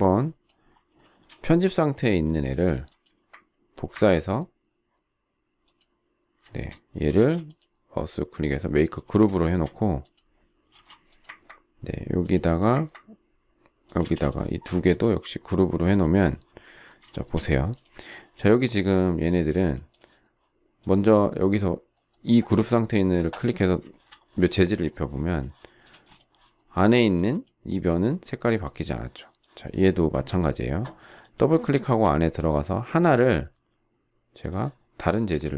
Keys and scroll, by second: 2.5 m, 7.1 shift+space, 10.7 shift+m, 14.0 space, 25.8 space.